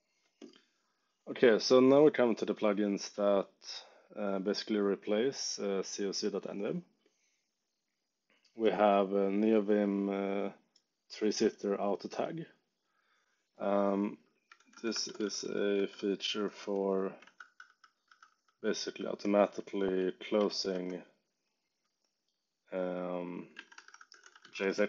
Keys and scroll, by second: 14.5 super+t, 14.6-16.7 typing, 17.2 ctrl+d, 19.5-21.0 typing, 23.3-24.8 typing.